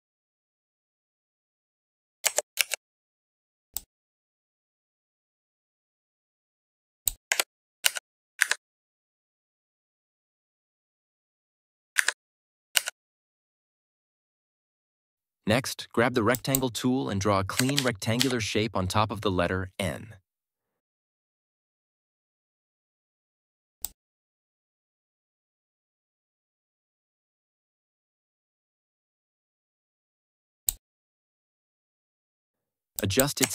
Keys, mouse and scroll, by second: 2.1 ctrl+Up, 2.5 ctrl+t, 3.6 click, 3.7-7.0 drag, 7.2 Return, 7.7 Down, 8.3 Up, 11.9 Up, 12.7 Down, 16.2 click, 17.7 ctrl+=, 24.0-30.6 drag.